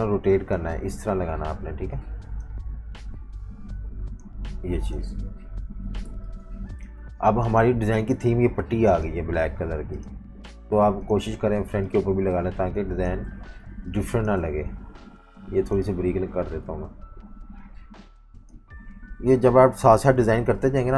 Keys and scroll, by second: 1.6-3.1 typing, 5.1 super+-, 5.3 super+-, 6.1-7.5 typing, 13.6-15.0 typing, 16.1 typing, 16.6 super+-, 16.8 super+-, 16.9 super+-, 19.4 Page_Down, 19.6 Page_Down, 19.8 Down, 20.2 Right, 20.4 Right, 20.6 Down, 20.8 Down.